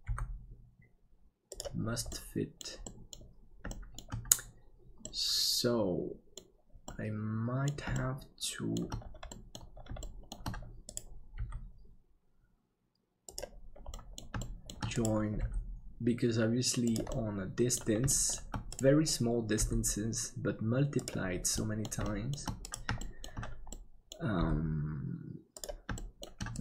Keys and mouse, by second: 0.0 g, 2.1 middle click, 2.9 middle click, 3.7 shift+middle click, 5.1-6.3 middle drag, 6.9 middle click, 7.9 shift+middle click, 9.3 middle click, 10.1 shift+middle click, 11.3 g, 13.9 middle click, 14.4 shift+middle click, 15.4 g, 17.1 middle click, 18.1 middle click, 19.6 g, 21.6 middle click, 22.1 shift+middle click, 22.9 shift+middle click, 23.7 middle click, 24.3 g, 26.0 middle click.